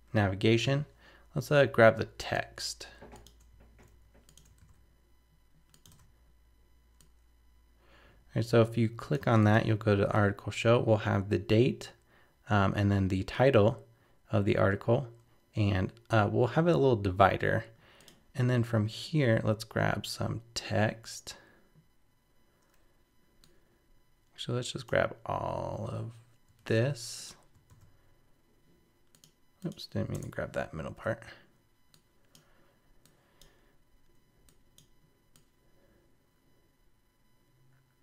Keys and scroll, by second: 4.6 super+c, 5.9 super+v, 26.6 super+c, 27.7 super+v.